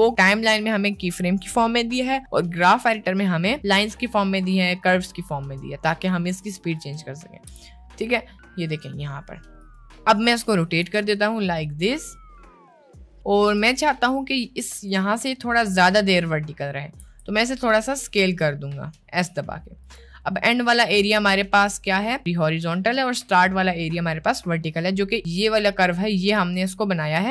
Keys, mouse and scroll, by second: 7.7 g, 10.8 r, 17.1 s.